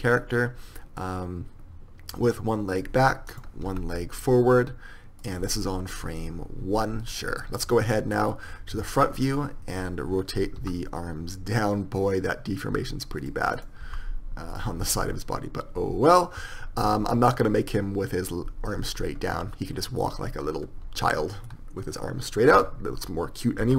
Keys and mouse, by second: 0.1 r, 3.9 r, 7.9 middle click, 9.0 KP_1, 10.8 r, 14.7 r, 21.7-22.8 middle drag, 22.8 KP_1.